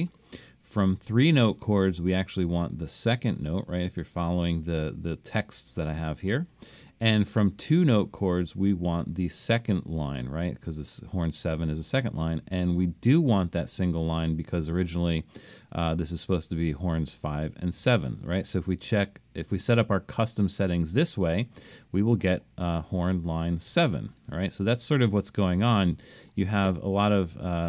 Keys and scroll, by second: 3.2 2, 8.6 2.